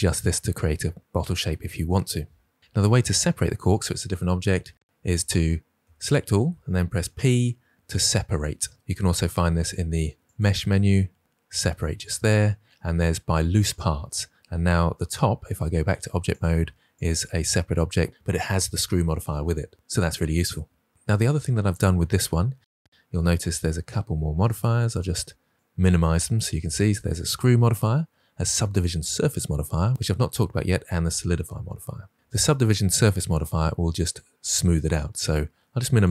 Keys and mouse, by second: 2.9 Tab, 4.8 Tab, 5.7 a, 6.9 p, 10.3-13.7 drag, 15.7 Tab, 16.9 click, 17.4 click, 22.6 click, 24.8 click, 35.8 click.